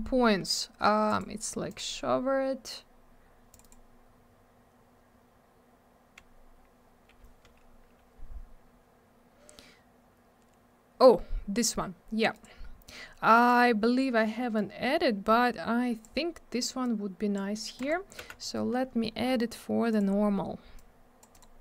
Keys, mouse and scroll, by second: 14.6 click, 15.6 click, 16.8 click, 17.7 click, 17.9 click, 18.2 m, 19.9 click, 19.9 click, 20.7 click, 21.3 click, 21.4 click.